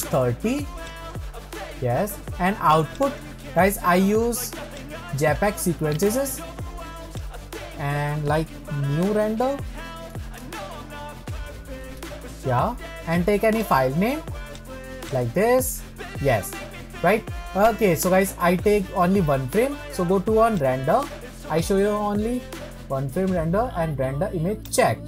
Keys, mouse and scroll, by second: 1.2-7.7 drag.